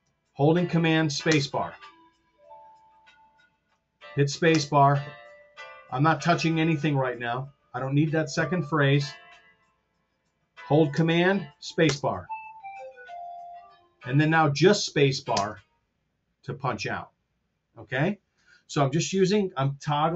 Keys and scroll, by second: 1.4 super+space, 4.5 super+space, 12.0 super+space, 15.4 space.